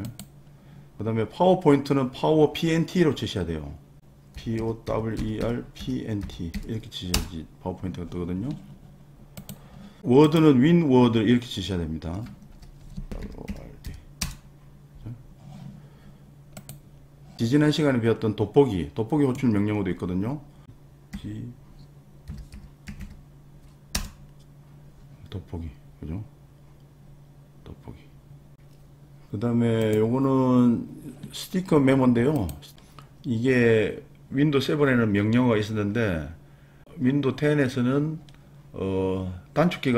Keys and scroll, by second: 4.1-7.0 typing, 7.1 Return, 12.5 super+r, 12.9-14.4 typing, 21.1-23.4 typing, 23.9 Return.